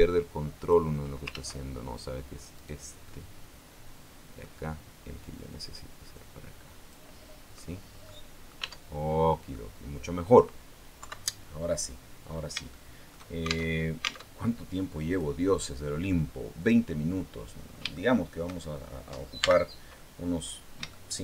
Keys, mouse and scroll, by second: 1.1 ctrl+z, 2.3 right click, 2.9-4.3 middle drag, 5.1-6.9 drag, 6.9-7.7 scroll down 2, 7.7 scroll up 1, 7.9 middle click, 8.4 Tab, 8.9 scroll down 1, 9.3-10.3 middle drag, 10.8 KP_3, 11.5-11.8 scroll down 2, 12.1 scroll up 3, 12.5 shift+click, 13.5 alt+shift+Tab, 14.9 click, 16.4 click, 17.1 scroll down 2, 17.7 shift+middle click, 19.2 n, 20.2 scroll up 2, 20.7 shift+middle click.